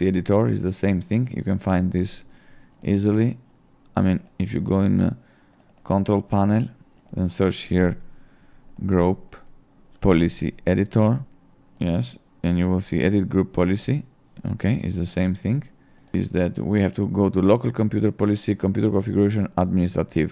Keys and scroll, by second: 7.9-9.7 typing.